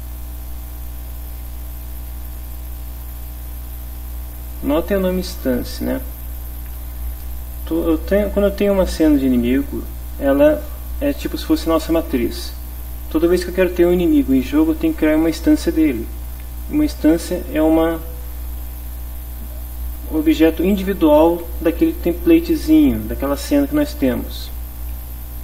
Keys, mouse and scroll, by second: 2.5 click, 4.5 click, 6.1 click.